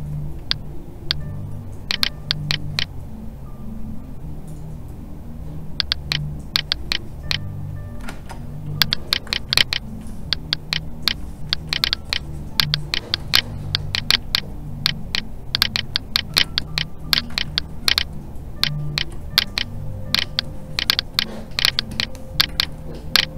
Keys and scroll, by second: 8.1 ctrl+z.